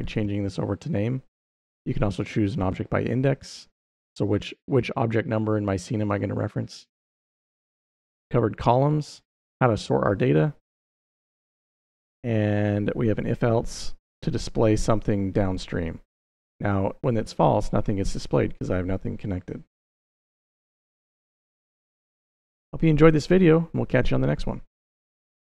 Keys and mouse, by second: 6.9 middle click, 10.4 middle click, 12.2 middle click, 15.5 middle click, 21.7 click, 23.2 middle click.